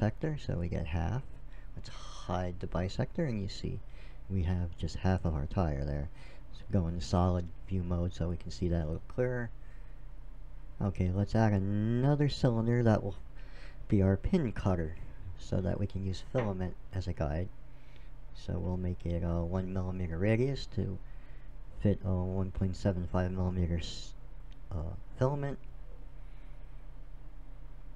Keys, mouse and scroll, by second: 2.2 click, 5.3 click, 5.9-7.0 middle drag, 10.0 click, 11.6-13.3 drag, 12.9 m, 14.8 click, 16.0 click, 16.3 click, 16.4 click, 20.9-22.7 drag, 25.0 KP_7, 27.0 Tab.